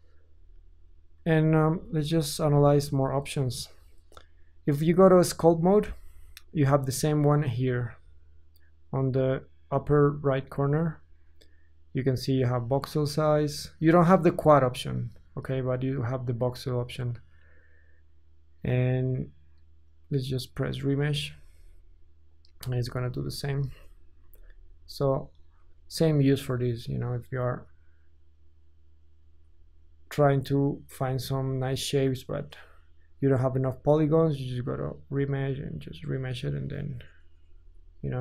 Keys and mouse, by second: 0.3 Tab, 1.2 ctrl+z, 1.7 ctrl+z, 2.3 ctrl+z, 4.8 ctrl+Tab, 9.9-23.5 drag, 22.6 Tab, 23.1 Tab, 23.5 ctrl+z, 24.3 ctrl+z, 24.8 ctrl+z, 25.9 click, 27.9-38.2 drag.